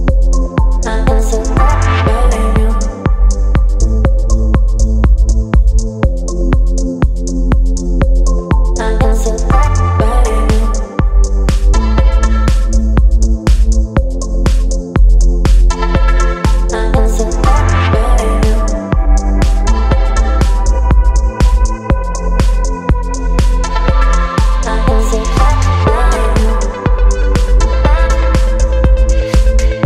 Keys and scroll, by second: 5.1 Down, 16.0 space, 18.3 Left, 21.2 Left, 21.2 Left, 22.5 Left, 24.9 space, 28.5 space.